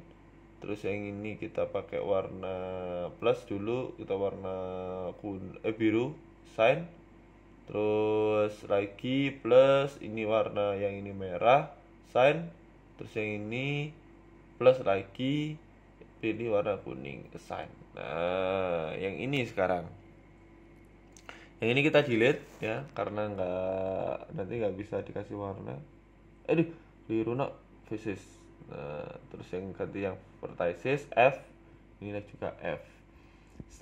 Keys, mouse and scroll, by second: 1.3 click, 1.5 click, 4.7 click, 5.3 click, 8.6 click, 8.6 right click, 9.4 click, 10.3 click, 11.4 right click, 12.0 right click, 13.0 click, 13.6 click, 15.7 click, 16.0 scroll down 2, 16.2 Tab, 16.6 Tab, 16.8-17.6 scroll up 5, 17.1 shift+middle click, 17.6 shift+middle click, 18.1 a, 18.3 a, 18.8 c, 23.8 Delete, 24.7 ctrl+z, 25.1 Delete, 26.0 middle click, 26.4 KP_3, 27.7 click, 28.5 click, 29.4 f, 29.6 click, 30.3 f, 30.8 KP_1, 31.2-31.9 scroll up 2, 31.9 KP_3, 32.5 click, 33.0 middle click, 33.4 KP_1.